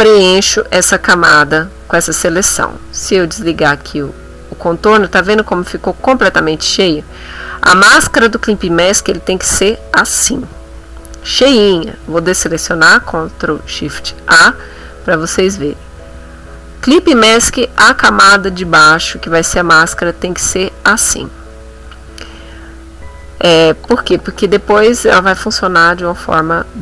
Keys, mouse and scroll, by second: 1.5 middle click, 3.4 click, 6.0 ctrl+middle click, 6.5-7.6 ctrl+middle drag, 12.4 ctrl+shift+a, 14.9 middle click, 15.5-16.7 ctrl+middle drag, 17.1-18.1 middle drag, 18.3 middle click, 18.9 middle click, 19.9 ctrl+middle click, 20.7 ctrl+middle click, 25.9 middle click.